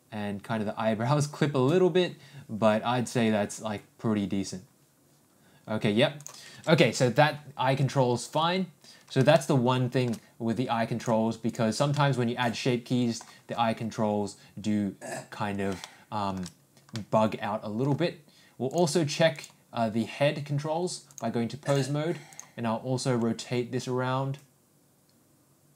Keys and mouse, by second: 9.3 ctrl+alt+shift+middle click, 11.0 click, 11.9-13.2 middle drag, 15.8-16.3 shift+middle drag, 16.9 middle click, 21.1 click, 23.0 r.